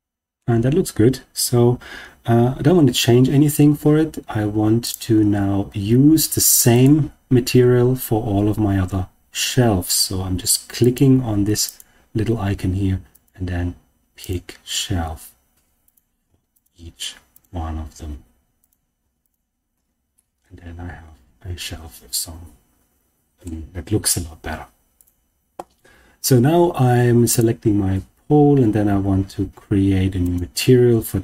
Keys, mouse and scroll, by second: 4.7 click, 6.6-10.8 drag, 11.6-13.2 drag, 14.1 click, 15.8 click, 17.2 click, 18.5 click, 20.0-23.4 middle drag, 24.9 click, 27.2 click, 30.2 click.